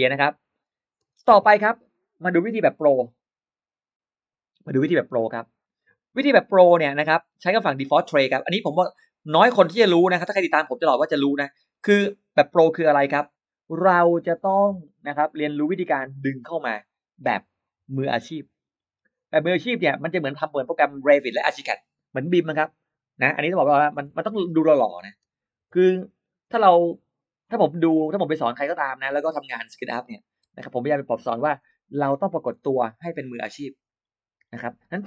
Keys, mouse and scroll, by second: 0.6 space, 1.2-1.5 scroll up 1, 7.2 click, 8.6 click, 10.1 click, 11.2-11.9 scroll down 2, 11.9-12.2 scroll up 1, 15.2 click, 19.7 click, 22.4 f, 23.8-26.0 typing, 28.6 click, 29.2 click, 30.3 f, 31.4 Return.